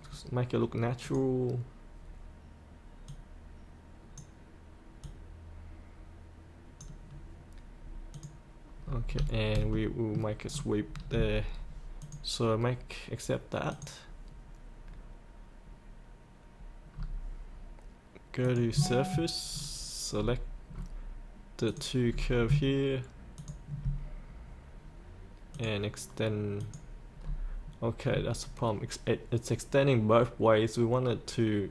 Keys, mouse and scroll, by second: 1.1-6.8 drag, 8.9 scroll up 1, 9.7 middle click, 10.4 scroll down 1, 12.0 click, 16.9-18.4 scroll up 1, 18.4 click, 19.5-20.2 scroll down 2, 21.7 click, 22.1-22.4 scroll up 1, 23.4 ctrl+click, 25.5 click, 27.2-31.7 scroll up 1.